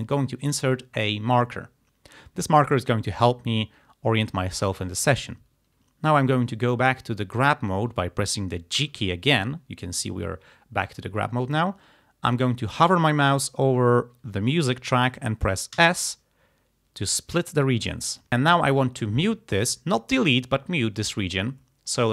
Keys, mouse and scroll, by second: 8.8 g, 15.8 s, 17.4 click, 18.3 click.